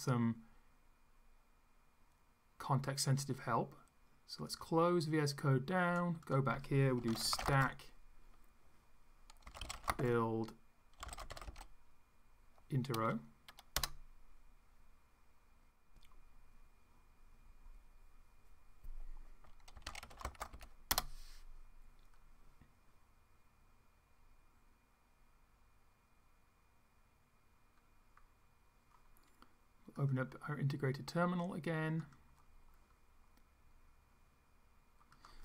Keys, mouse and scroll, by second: 4.4 click, 6.3 click, 6.7-7.9 typing, 9.2-11.9 typing, 13.9 Return, 19.5-21.0 typing, 29.9 click, 32.0 click, 35.2 click.